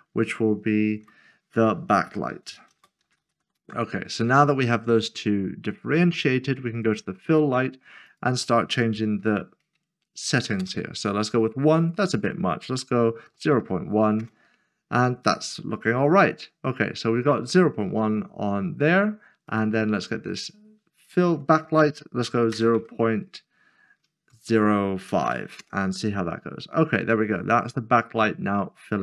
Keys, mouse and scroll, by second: 1.0 F2, 2.1-3.5 typing, 3.5 Return, 6.8 click, 9.2 typing, 10.6 Return, 11.8 click, 13.3-13.6 typing, 14.2 Return, 15.9-16.9 scroll up 1, 16.9 scroll down 1, 19.5 click, 22.5 typing, 24.2-25.0 typing, 25.6 Return, 27.0 scroll up 1.